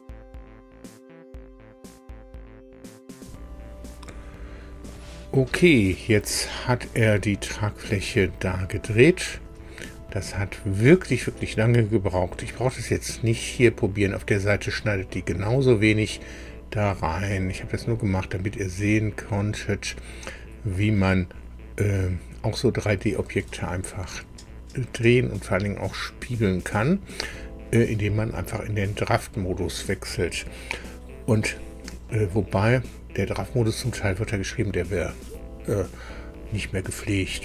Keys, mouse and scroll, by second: 8.6-12.7 drag, 14.7-16.1 drag, 16.9-21.0 drag, 23.5-25.8 drag, 26.5-27.0 scroll down 1.